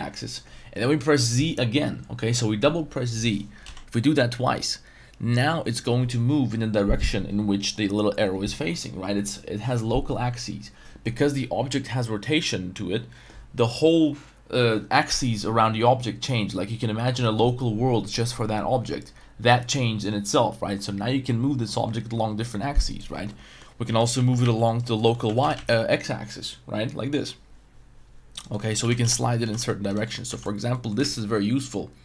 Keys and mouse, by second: 3.6 z, 22.9 right drag, 23.3-23.6 middle drag, 23.8-25.5 typing, 24.8 right click, 25.0 middle click, 28.3 right click, 28.5 middle drag, 28.8-31.0 typing, 29.9 right click, 30.0 middle drag, 30.7 middle click.